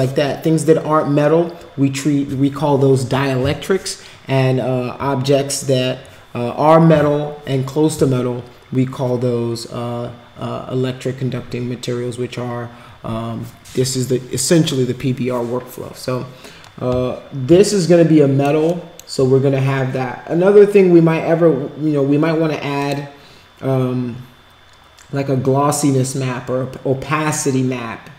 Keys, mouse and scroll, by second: 17.7 alt+click, 18.8 alt+middle click, 22.8 click.